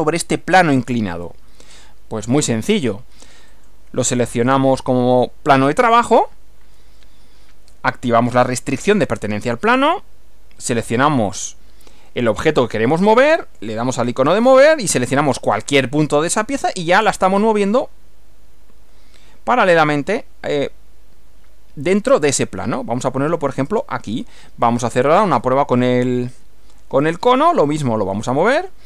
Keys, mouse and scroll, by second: 3.6 click, 5.2 click, 11.4 click, 13.5 click, 15.6 click, 23.6 click, 27.1 click, 28.5 click.